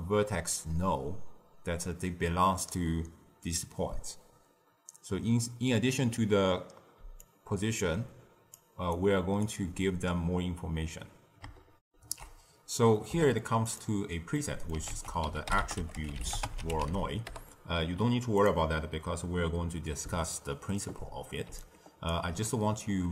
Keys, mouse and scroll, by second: 7.1-8.9 drag, 8.9-11.8 right drag, 11.8 ctrl+alt+shift+q, 13.0 z, 14.3 middle click, 14.8 ctrl+a, 15.5 t, 20.0-22.4 typing, 20.3-20.7 drag, 21.5 right click.